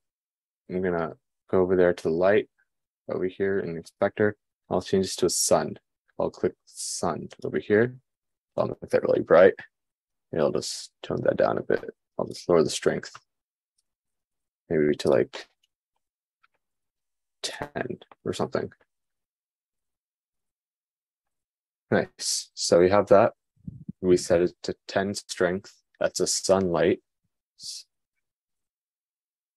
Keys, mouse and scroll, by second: 10.8-29.5 drag, 16.6 1, 17.7 BackSpace.